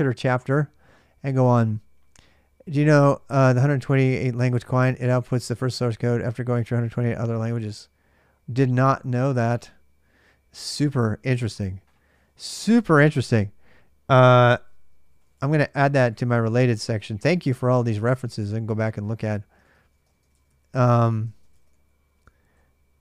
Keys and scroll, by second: 12.0-17.7 typing, 19.4-22.4 typing.